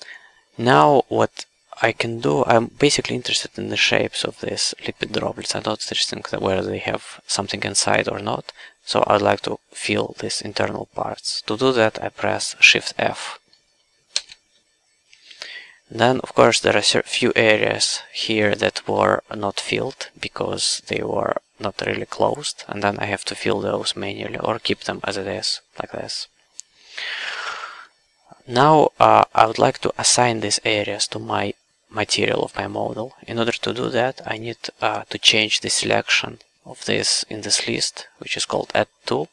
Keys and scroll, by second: 14.1 shift+f, 16.4 w, 30.5 q.